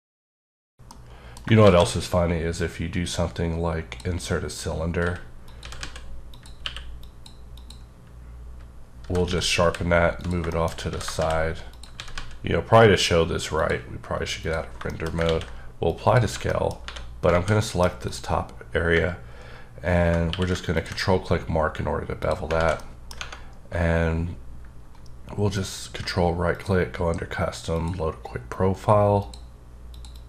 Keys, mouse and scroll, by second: 1.4 shift+Num_Lock, 1.4 click, 1.6 a, 2.5-4.3 drag, 4.3 scroll up 1, 4.5-4.9 scroll down 2, 5.1 s, 5.4 click, 5.6 s, 5.9 z, 6.3 click, 6.6 q, 7.0 click, 7.5 click, 9.0 g, 9.4 x, 9.7 y, 10.2 click, 10.5 shift+middle click, 10.8 s, 11.2 shift+z, 11.7 click, 11.9 s, 12.1 z, 13.5 click, 14.4 click, 14.9 shift+middle click, 15.2 a, 15.8 click, 16.5 middle click, 16.8 3, 17.5 alt+z, 17.6 middle click, 18.0 click, 20.3 q, 20.7 ctrl+click, 21.4-22.1 scroll up 5, 22.2 click, 22.5 alt+z, 22.7 middle click, 25.5 ctrl+right click, 26.5 click, 27.7 click, 29.2 click, 29.9 click, 30.1 double click.